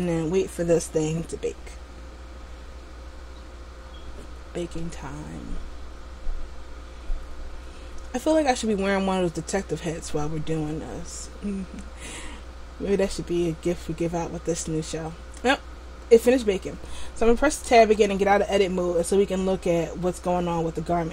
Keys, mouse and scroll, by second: 17.9 Tab.